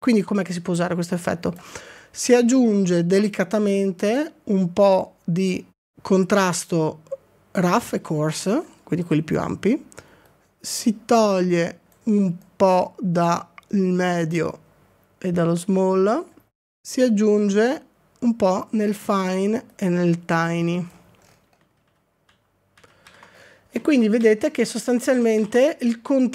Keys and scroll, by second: 21.8 ctrl+d, 22.3 ctrl+d, 22.8 ctrl+d, 23.2 ctrl+d, 24.0 ctrl+d, 24.2 ctrl+d, 25.2 ctrl+d.